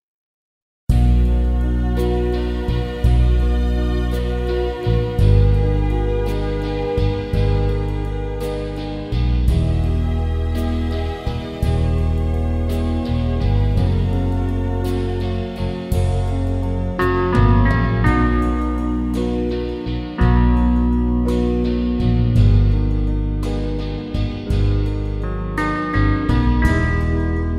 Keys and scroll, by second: 23.6 ctrl+s.